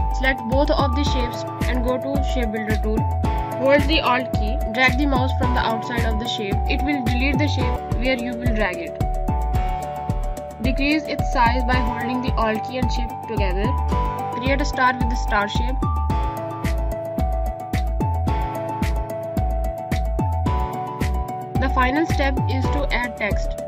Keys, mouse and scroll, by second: 0.7 click, 2.7 z, 3.5 click, 7.2 click, 11.1 alt+scroll down 1, 12.6 shift+click, 13.1 click, 13.9 right click, 14.8 click, 16.0 Up, 18.1 click, 18.3 space, 18.4 click, 18.8 space, 19.4 click.